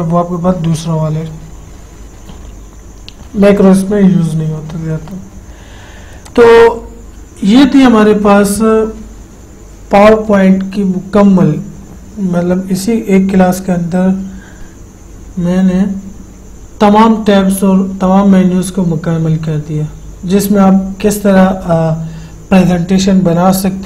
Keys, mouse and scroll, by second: 6.5 click, 6.6 click.